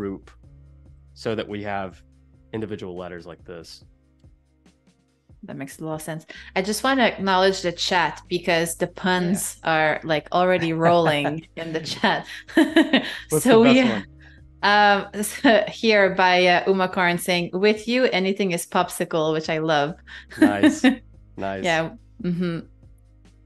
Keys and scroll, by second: 0.8 super+g, 3.3 super+z, 5.5 shift+super+], 8.2 super+g, 10.8 shift+super+], 14.6 super+g, 17.7 shift+super+], 21.5 shift+super+g.